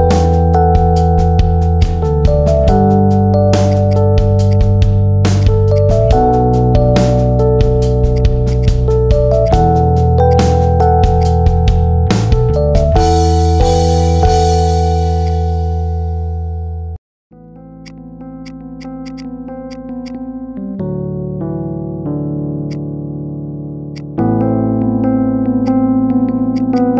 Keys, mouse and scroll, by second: 2.0-3.0 middle drag, 3.0 Tab, 3.2-3.6 middle drag, 3.6 right click, 4.4 click, 5.2-5.6 drag, 5.8-6.6 middle drag, 6.6 scroll up 2, 6.8-7.6 middle drag, 7.6 Tab, 8.0 click, 8.4 alt+shift+click, 8.8-9.2 middle drag, 9.2 alt+shift+click, 9.5-10.2 middle drag, 10.2 alt+shift+drag, 10.4-11.0 middle drag, 11.0 alt+shift+click, 11.5 ctrl+b, 12.8-14.0 middle drag, 14.0 Tab, 14.2-14.6 middle drag, 14.6 scroll up 1, 14.8-15.1 middle drag, 15.1 drag, 15.4 scroll down 2, 15.6-16.2 middle drag, 16.2 Tab, 16.7 middle click, 17.2 KP_7, 17.7 click, 18.3 click, 18.9 alt+shift+click, 19.6 shift+click, 19.8 shift+click, 20.0-22.5 middle drag, 22.5 right click, 23.8 click, 24.4 Tab, 24.6 middle click, 25.3 shift+d, 26.4 click, 26.6 click.